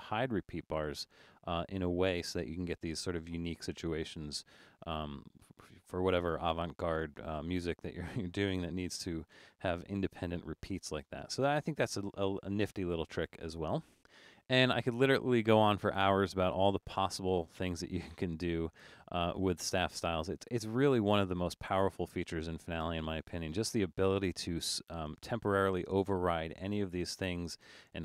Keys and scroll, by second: 9.0 super+-, 9.4 super+-, 10.2 super+-, 11.1 super+=.